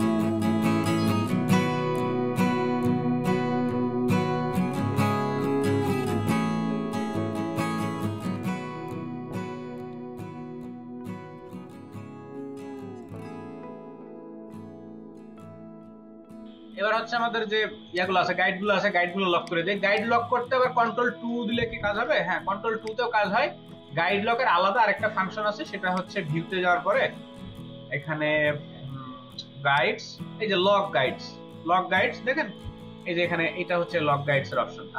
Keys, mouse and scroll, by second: 0.1 ctrl+click, 0.3 space, 0.9 ctrl+click, 2.8 ctrl+alt+click, 2.9 ctrl+alt+click, 3.1 ctrl+alt+click, 3.1 space, 4.1 ctrl+double click, 4.1 ctrl+click, 4.2 space, 4.4 space, 5.3 right click, 6.7 ctrl+space, 7.1 ctrl+alt+double click, 7.7 double click, 8.4 double click, 8.6 |, 9.9 space, 10.3 ctrl+alt+click, 10.5 ctrl+alt+double click, 10.7 ctrl+alt+double click, 11.5 double click, 14.5 space, 14.9 space, 21.7 ctrl+2.